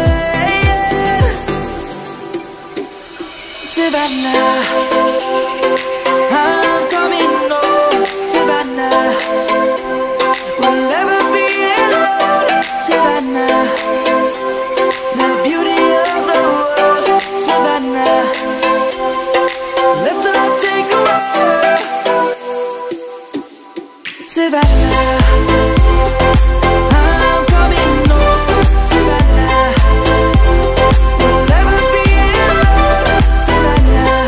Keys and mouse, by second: 8.0 Tab, 9.6 click, 11.0 middle click, 13.3 Tab, 14.0 click, 15.4 shift+d, 16.4 right click, 17.7 click, 18.8 middle click, 22.5 middle click, 24.5 click, 27.0 e, 30.8 middle click, 32.4 s.